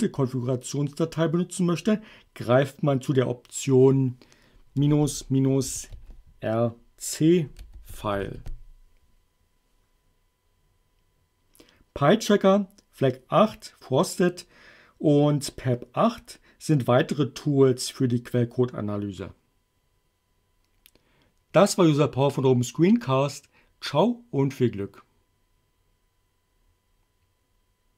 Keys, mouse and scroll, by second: 4.8-8.8 typing.